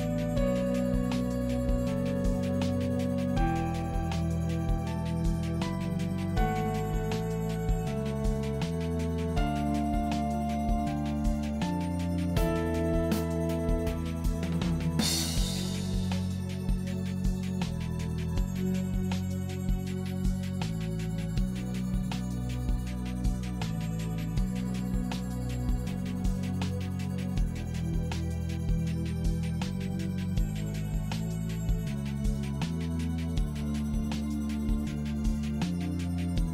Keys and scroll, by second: 22.4 ctrl+t.